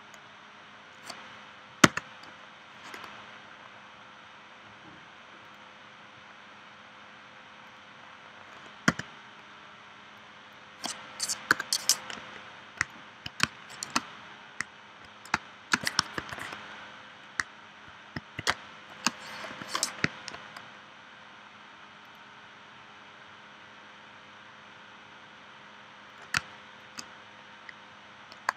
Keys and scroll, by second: 1.8 c, 8.9 v, 11.5 BackSpace, 13.4 space, 15.3 space, 16.2 super+s, 18.5 space, 19.5 p, 26.4 space.